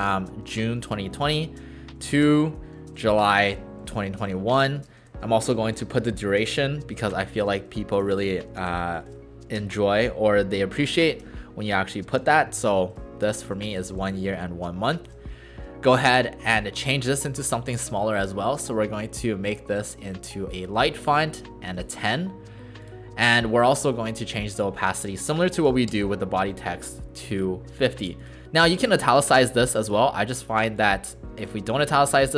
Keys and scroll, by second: 0.0-5.0 typing, 7.3-9.5 typing, 11.8-13.4 typing, 15.0 shift+0, 25.9 Return, 25.9 typing.